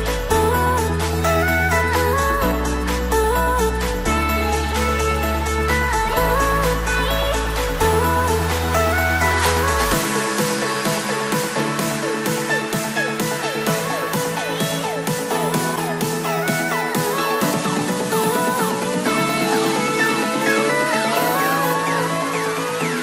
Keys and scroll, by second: 13.4 Return.